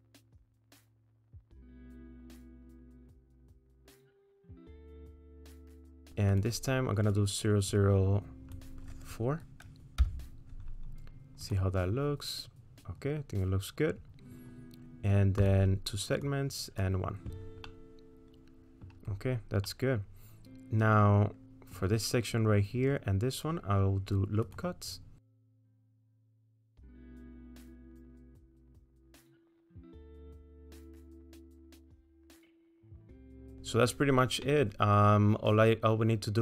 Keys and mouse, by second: 0.3 middle click, 1.1 middle click, 1.4 shift+middle click, 1.9 middle click, 2.6 shift+click, 2.7 middle click, 3.1 shift+click, 3.4 middle click, 4.1 middle click, 5.4 click, 5.9 middle click, 6.4-11.6 drag, 15.4 click, 16.2 click, 17.7-18.9 middle drag, 19.7-21.8 middle drag, 24.4 click, 25.4-27.1 drag, 28.8-31.3 drag, 31.7 middle click, 32.2-33.4 middle drag, 34.5-36.4 middle drag.